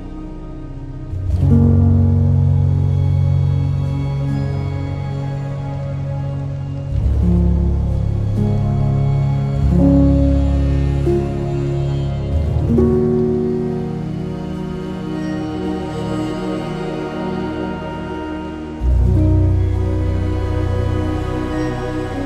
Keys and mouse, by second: 0.0 click, 0.8 g, 1.4 click, 2.0 ctrl+b, 3.1 click, 3.6 click, 4.3 e, 5.1 click, 5.4 r, 6.3 click, 7.0 e, 7.8 click, 8.4 e, 10.1 click, 10.9 r, 11.9 click, 12.2 g, 12.6 click, 13.2 click, 14.6 click, 14.6 r, 15.0 g, 15.8 click, 17.3 1, 17.5 click, 18.3 g, 18.4 g, 19.0 click, 20.4 2, 21.5 ctrl+b.